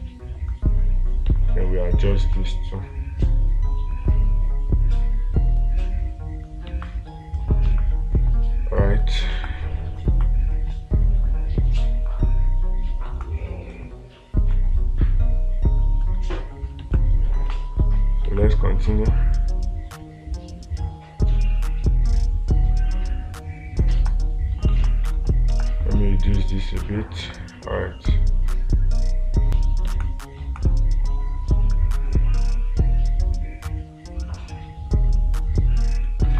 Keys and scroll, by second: 7.3 space, 9.9 space, 13.6 space, 17.4 space, 24.5 space, 25.3 space, 30.4 space.